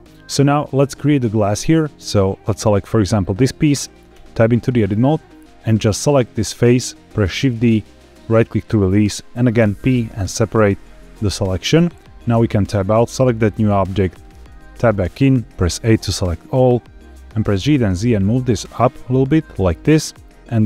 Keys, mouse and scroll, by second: 1.9 click, 4.1 Tab, 5.6 click, 7.3 shift+d, 8.1 right click, 9.5 p, 12.3 Tab, 13.0 click, 14.4 Tab, 15.5 a, 17.4 g, 17.7 z, 20.0 click.